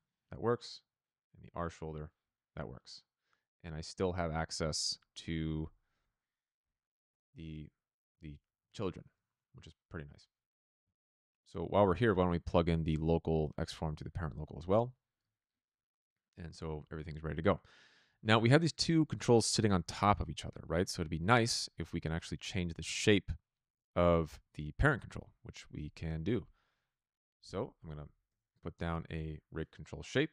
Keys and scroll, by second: 14.7 n, 27.4 Tab, 27.5-28.4 typing, 29.1 Return.